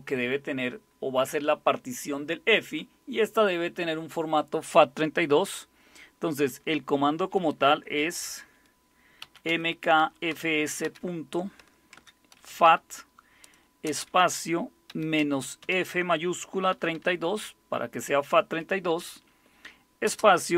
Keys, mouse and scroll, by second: 9.2-10.8 typing, 12.1-17.4 typing, 20.1 space.